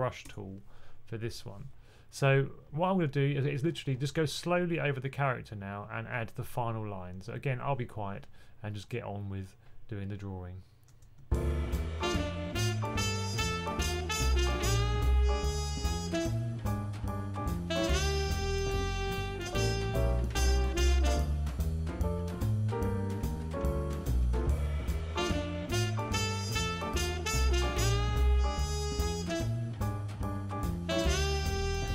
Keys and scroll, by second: 3.7-4.3 typing, 17.0 1, 22.8 super+z, 28.1 super+z.